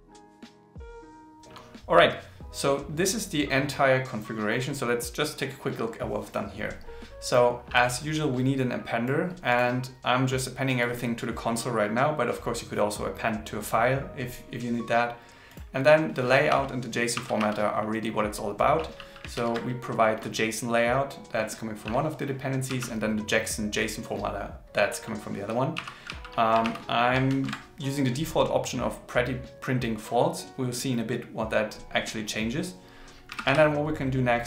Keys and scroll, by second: 0.0-0.4 typing, 0.8 super+s, 19.3 super+Right, 26.6 super+Left.